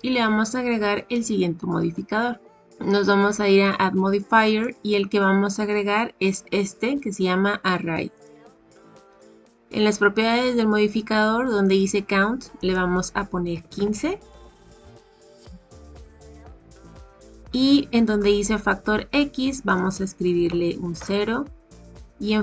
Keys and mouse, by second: 4.5-8.2 drag, 12.6-15.1 drag, 19.7-21.6 drag.